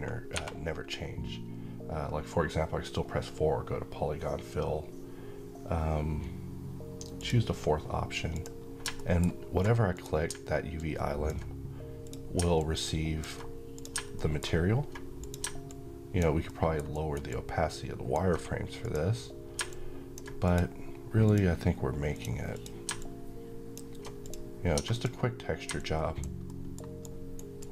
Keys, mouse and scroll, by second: 0.1 4, 6.9 click, 8.7 middle click, 9.6-13.4 drag, 13.8 middle click, 14.9 click, 16.2 alt+middle click, 16.6 alt+right click, 17.0-17.9 alt+drag, 25.5-26.1 alt+click, 26.1 alt+middle click, 26.7-27.7 alt+right drag.